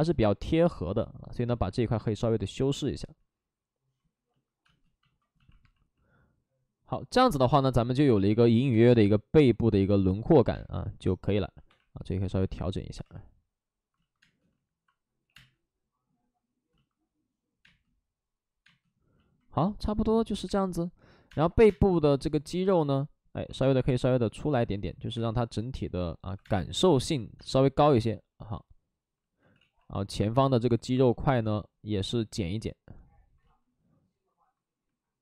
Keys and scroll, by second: 1.0 ctrl+z, 4.6 space, 8.7 space, 9.6 space, 10.5 space, 11.6 1, 14.2 space, 14.2 2, 15.1 3, 15.2 space, 17.5 space, 18.5 space, 20.4 space, 21.2 space, 21.5 3, 23.4 ctrl+z, 23.5 space, 26.3 2, 26.3 space, 29.3 ctrl+z, 32.1 ctrl+z.